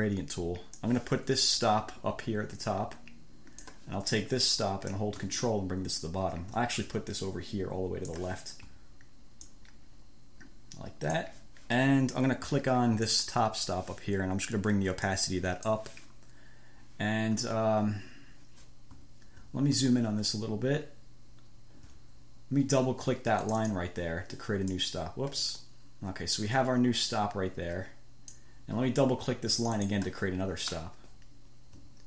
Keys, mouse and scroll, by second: 1.0-4.2 drag, 5.2-8.6 drag, 9.8-11.7 ctrl+drag, 13.4 click, 15.3 click, 20.6-21.3 ctrl+scroll up 4, 21.8 scroll up 2, 23.7 click, 25.0 click, 26.6-28.8 drag, 29.9 click, 31.0 scroll down 2, 31.3-31.7 scroll up 2.